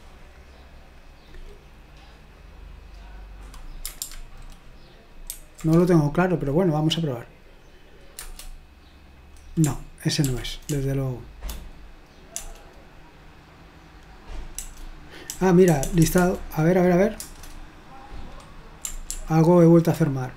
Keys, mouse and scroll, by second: 0.0 click, 1.0 click, 2.0 click, 2.1 right click, 5.3 ctrl+alt+v, 8.2 Return, 10.3 ctrl+p, 10.7 BackSpace, 11.4 BackSpace, 11.5 BackSpace, 12.4 BackSpace, 14.6-16.2 typing, 17.2 Return, 19.1 ctrl+p.